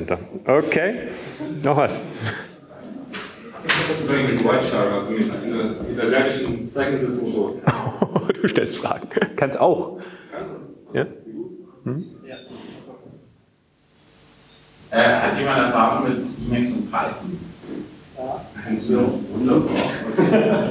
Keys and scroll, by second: 3.4-4.3 typing.